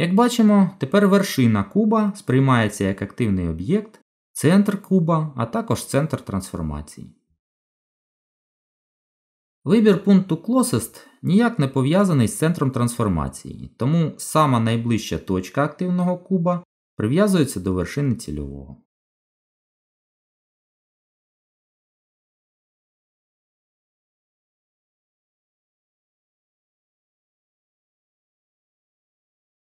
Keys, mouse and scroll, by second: 9.0 click, 13.1 g, 25.2 z, 26.8 middle click.